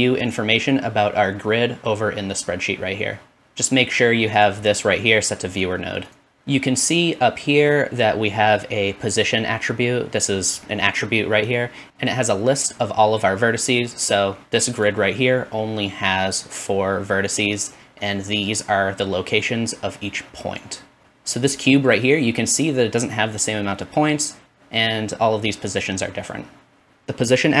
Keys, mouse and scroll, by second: 4.4 click, 21.0-27.6 drag.